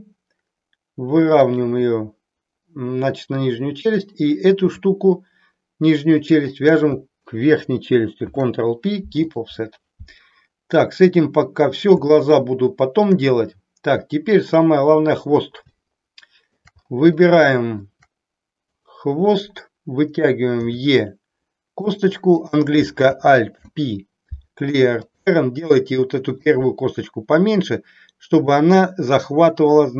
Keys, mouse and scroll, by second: 1.4 click, 3.9 click, 6.3 shift+click, 8.1 ctrl+p, 12.2 shift+middle click, 15.8 shift+middle click, 17.3 shift+middle click, 18.7 click, 20.5 e, 21.8 click, 22.3 click, 23.5 alt+p.